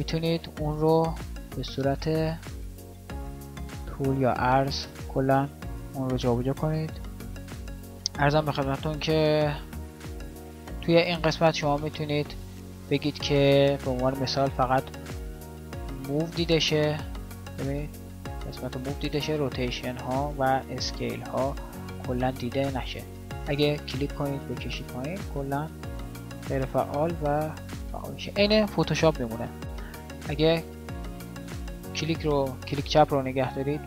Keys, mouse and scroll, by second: 28.9 click.